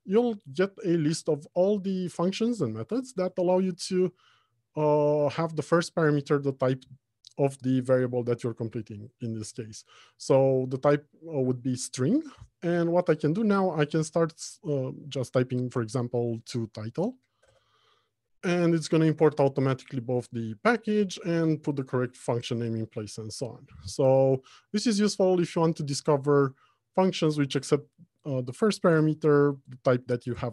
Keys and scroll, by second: 17.9 Return.